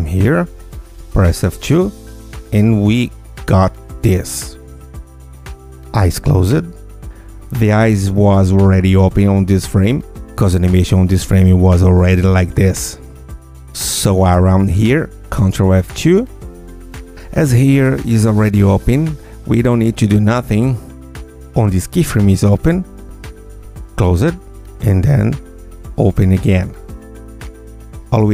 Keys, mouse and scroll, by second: 1.3 F2, 4.3-8.2 drag, 13.3 click, 15.7 ctrl+F2, 21.3 click, 23.1 click, 24.7 click, 26.9 F2, 28.1-28.3 drag.